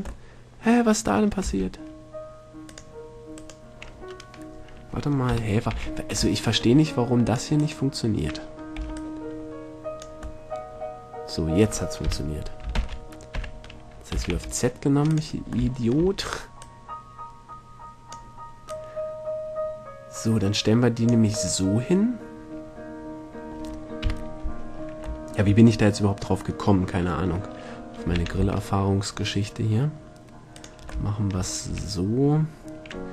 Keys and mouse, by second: 0.3-1.5 middle drag, 1.6 x, 5.5 KP_7, 5.9 a, 9.0 b, 10.6 middle click, 10.8 middle click, 11.0 middle click, 11.1 middle click, 12.3 KP_7, 12.9 shift+d, 16.8-18.6 drag, 18.9-20.7 drag, 20.7-22.1 middle drag, 24.2 KP_7, 24.9 middle click, 25.9 middle click, 28.3 shift+d, 30.8 click, 31.9 a.